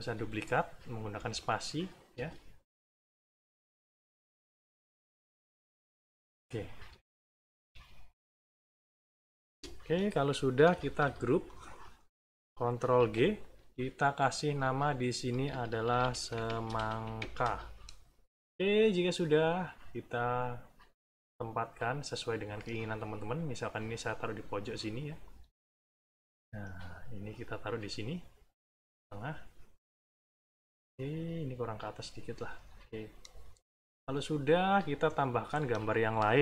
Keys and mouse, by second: 0.1 space, 1.1 space, 2.1-5.6 typing, 7.5 n, 8.0 click, 8.6 click, 9.4 space, 10.0 middle click, 10.5 -, 11.4 click, 12.9 ctrl+g, 14.2 click, 14.8 click, 15.6-17.6 typing, 18.5 middle click, 20.1-22.2 drag, 22.3 middle click, 23.4-25.2 drag, 25.4 middle click, 26.4 middle click, 27.0-30.7 drag, 30.8 middle click, 31.8 click, 32.8 middle click, 34.2-35.6 drag, 35.7 middle click.